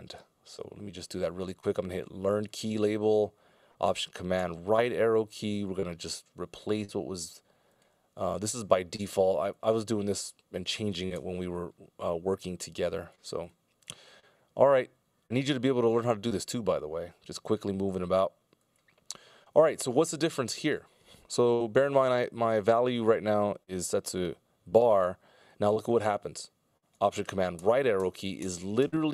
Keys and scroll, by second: 4.3 alt+super+Right, 25.6 Delete, 27.7 alt+super+Right, 28.2 alt+super+Right, 28.5 alt+super+Right.